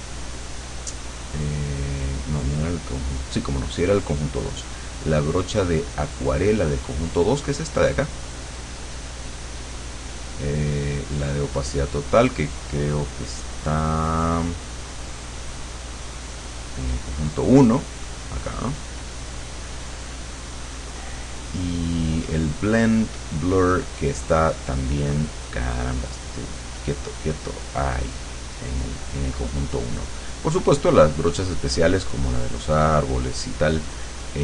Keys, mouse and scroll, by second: 1.0 click, 1.9 click, 4.4-7.3 drag, 11.3 click, 11.7 click, 14.1 click, 14.8 click, 16.3 click, 20.6-21.6 drag, 22.5 click, 25.8 click, 30.5 click, 32.0-34.4 drag.